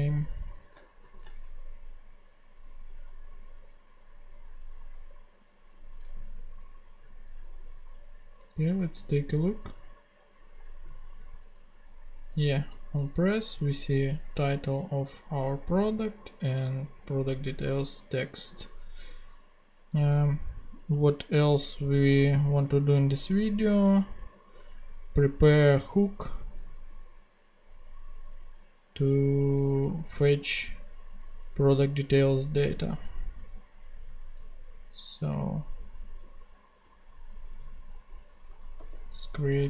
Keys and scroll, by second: 1.0 shift+super+p, 6.2 super+Tab, 38.8 super+n.